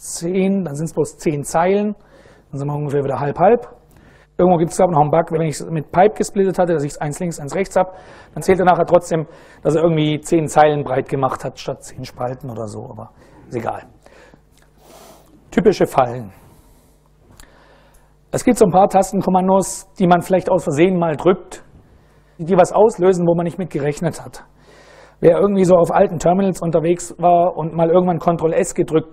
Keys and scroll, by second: 1.1 Return.